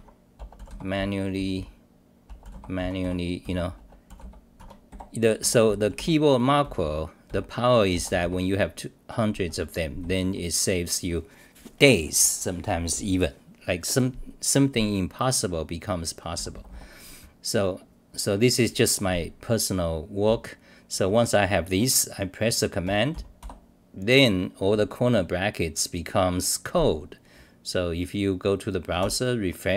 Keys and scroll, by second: 0.9 t, 1.2 t, 1.3 t, 1.5 t, 2.5-4.9 typing, 4.6 Home, 5.4 Home, 6.6 v, 6.8 v, 9.5 Home, 10.0 d, 10.2 d, 16.3 d, 16.5 d, 16.7 d, 17.2-18.3 scroll up 20, 19.0 scroll up 1, 20.2-21.0 c.